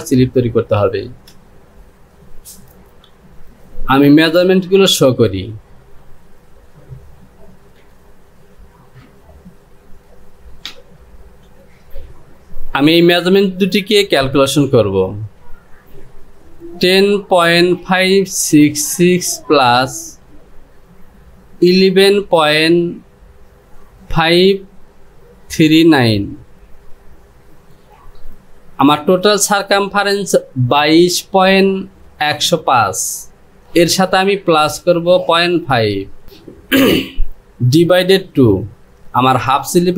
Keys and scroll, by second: 8.6 space, 11.7 space.